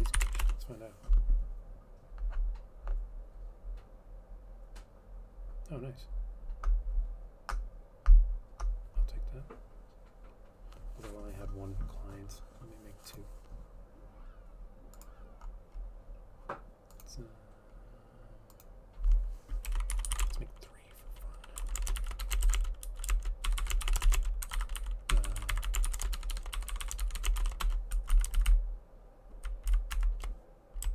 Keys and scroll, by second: 0.0-0.8 typing, 3.9-4.6 typing, 19.8-28.3 typing, 29.9 Down, 29.9-30.6 typing, 30.1 shift+Up.